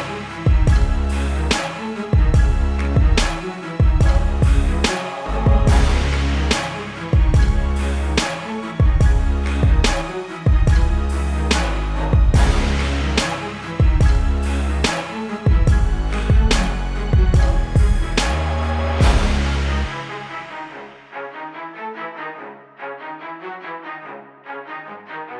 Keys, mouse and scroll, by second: 1.7 click, 7.2 KP_Enter, 7.5 typing, 8.8 click, 14.2 click.